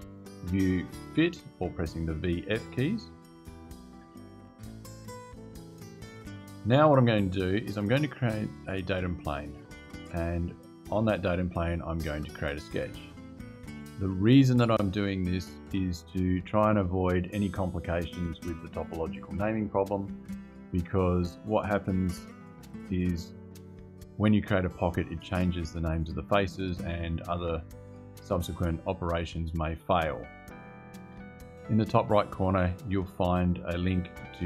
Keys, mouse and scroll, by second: 0.2 v, 0.8 f.